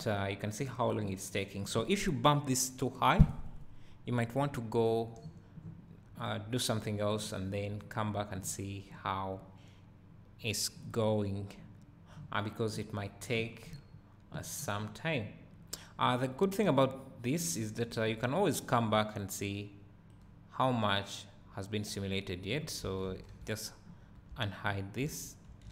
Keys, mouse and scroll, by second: 10.8-11.6 scroll down 1, 18.3 click, 20.2-23.7 right drag, 23.2 alt+h, 23.9-24.2 scroll down 2, 24.2 `, 24.6 right click, 24.7 scroll up 2, 24.8-25.7 right drag, 25.1 `.